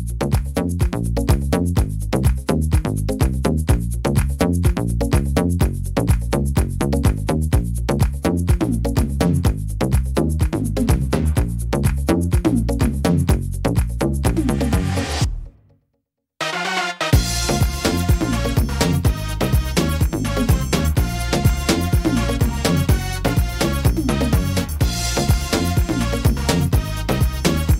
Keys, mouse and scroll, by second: 0.2 right click, 1.1 l, 2.1 x, 3.1 middle click, 4.0 right click, 5.0 l, 6.0 click, 7.5 middle click, 8.6 click, 10.4 click, 12.1 middle click, 13.4 click, 17.9 middle click, 18.8 middle click, 19.6 scroll up 2, 20.1 middle click, 21.6 s, 23.2 middle click, 24.4 s, 25.7 middle click, 26.8 click.